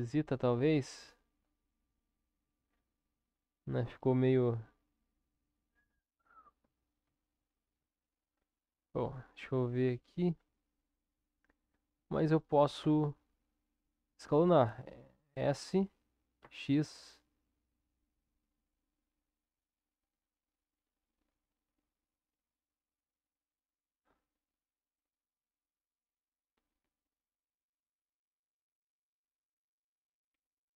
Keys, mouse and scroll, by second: 0.1 KP_7, 1.0 ctrl+KP_7, 3.3-5.9 middle drag, 5.9 click, 7.1 ctrl+KP_7, 8.7 Tab, 12.8 s.